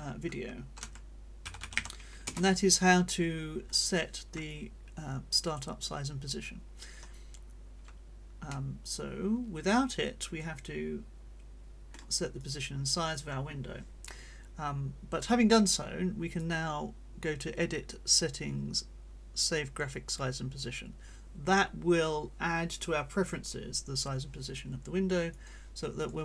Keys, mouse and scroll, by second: 0.8 c, 1.7 t, 2.2 Return, 4.5-5.8 drag, 8.5-12.1 drag, 12.4 click, 16.3 click, 19.9 click, 26.0 click.